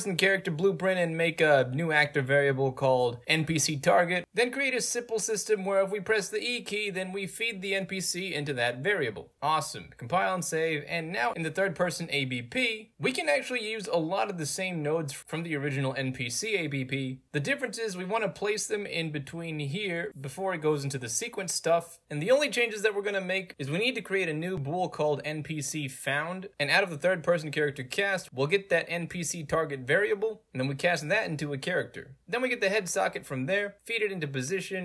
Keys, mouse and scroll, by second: 0.2 click, 1.1 click, 3.6 click, 4.3 click, 5.3 w, 5.9 e, 6.5 d, 7.4 click, 8.6 click, 9.3 click, 10.2 click, 11.4 click, 12.4 click, 14.3 middle click, 14.3 scroll down 2, 14.6-14.9 right drag, 15.2 middle click, 15.2 scroll up 2, 15.3 click, 16.0 click, 16.3-16.8 drag, 17.0 click, 19.6 click, 21.0 click, 21.7 right click, 22.0 middle click, 22.0 scroll up 2, 22.5 right click, 23.4 click, 25.8 right click, 26.5 click, 26.8 right click, 27.2 middle click, 27.2 scroll up 2, 27.4 scroll down 2, 27.8 middle click, 27.8 scroll up 2, 28.5 click, 29.6 click, 30.8-31.2 right drag, 31.6 click, 32.3 click, 32.5-33.1 right drag, 33.4 click, 34.7 click.